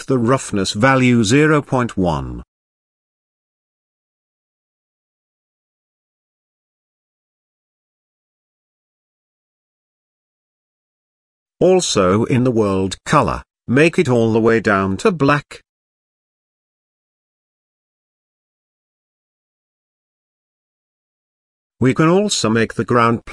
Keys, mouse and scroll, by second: 4.2 click, 5.1-5.7 scroll down 1, 5.7-6.7 scroll down 4, 6.8-8.5 drag, 9.0 click, 11.4 click, 12.4 click, 13.2 click, 15.2 z, 22.1 z, 23.0 click.